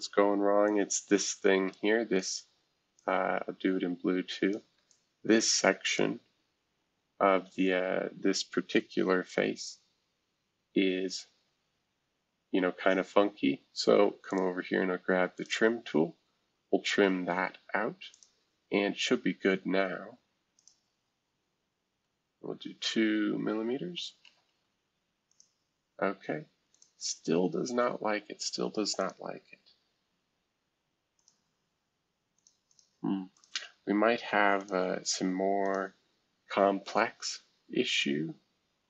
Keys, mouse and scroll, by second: 0.6-1.7 drag, 3.0-4.5 shift+drag, 4.9-7.5 ctrl+shift+drag, 7.5-8.6 scroll up 1, 9.0 shift+F2, 10.6-11.3 scroll up 1, 11.3-12.1 scroll up 1, 14.3-16.9 drag, 17.0 Escape, 18.1-19.7 drag, 20.6-22.1 drag, 24.0 2, 24.2 Tab, 25.3 click, 26.7 click, 29.0 click, 31.2 click, 32.3 click, 32.7 click, 33.3 click, 34.6 click, 35.0 right click, 35.6 click.